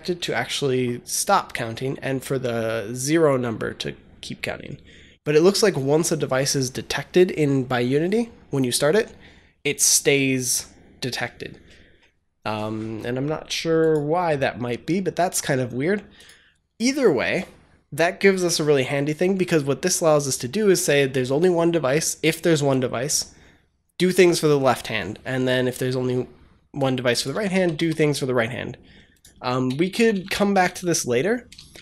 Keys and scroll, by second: 27.2 ctrl+c, 27.4 ctrl+v, 29.5-31.1 typing, 31.4 ctrl+s.